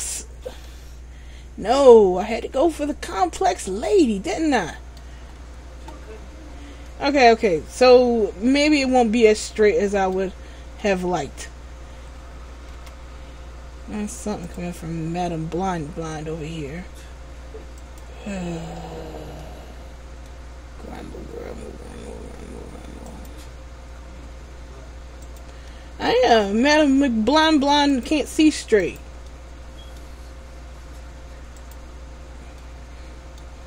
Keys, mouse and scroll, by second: 0.6 middle click, 6.3-6.7 scroll down 2, 7.0 middle click, 7.0 scroll down 1, 10.9 middle click, 12.9 k, 19.6 middle click, 25.9 middle click, 29.5 middle click.